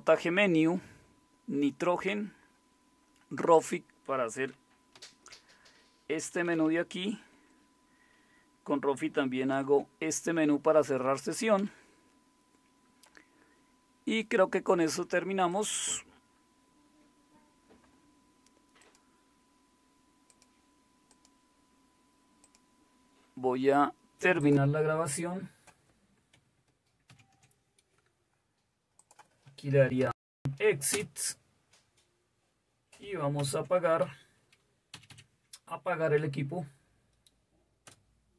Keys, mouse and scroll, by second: 4.9 alt+super+d, 6.3 Down, 6.5 Down, 7.3 Escape, 9.5 shift+super+x, 11.3 Down, 11.6 Up, 27.1 super+w, 29.6-30.9 typing, 30.9 Return, 34.7 shift+super+x, 35.0 Down, 35.9 Down, 38.2 Return.